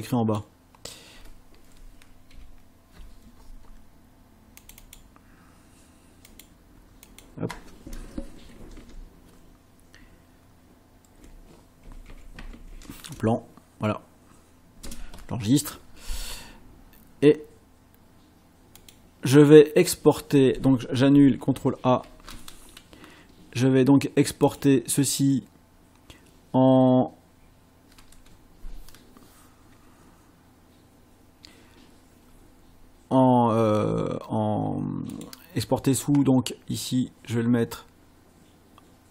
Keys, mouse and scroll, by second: 2.3 BackSpace, 4.6 click, 6.3 click, 7.0 click, 8.5 Left, 9.9 BackSpace, 11.6-13.2 typing, 14.8 Return, 18.8 click, 22.0 ctrl+shift+a, 24.4 click, 35.1 click.